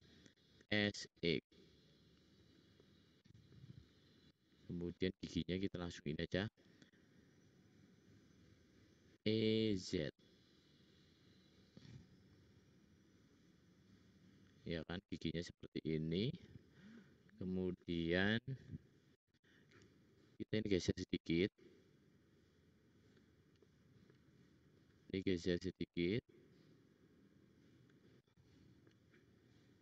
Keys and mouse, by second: 0.5 s, 1.9 click, 9.4 e, 19.4-20.7 drag, 19.4-20.7 middle drag, 19.4-20.7 right drag, 21.2-24.8 drag, 21.2-23.0 middle drag, 21.2-23.0 right drag, 25.7 click.